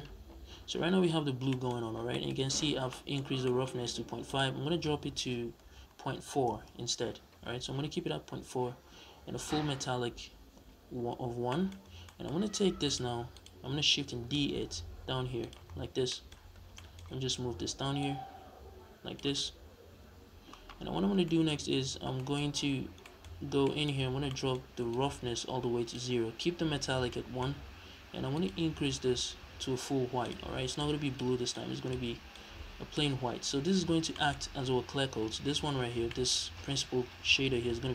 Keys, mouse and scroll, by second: 1.0-1.3 scroll down 2, 1.6-1.9 scroll up 1, 2.1-2.6 scroll up 1, 4.1-11.3 drag, 6.4 Return, 7.8-9.3 scroll down 2, 9.3-9.8 scroll down 1, 9.8-10.9 scroll down 1, 10.9-11.3 scroll down 1, 11.3-12.7 middle drag, 11.7 scroll down 2, 12.7 click, 13.2 click, 13.9 shift+d, 15.3 click, 15.7 scroll down 2, 15.9-17.8 middle drag, 17.8 click, 20.8 scroll up 1, 21.1-24.7 middle drag, 21.7 scroll up 2, 22.2-22.9 scroll up 2, 23.1-23.5 scroll up 2, 24.7-26.9 drag, 26.9-28.2 middle drag, 27.4-27.9 scroll up 2, 27.9 scroll up 1, 28.2 click, 32.7-33.0 middle drag, 33.6-34.0 scroll down 2, 34.0-37.9 middle drag, 35.7 scroll down 2.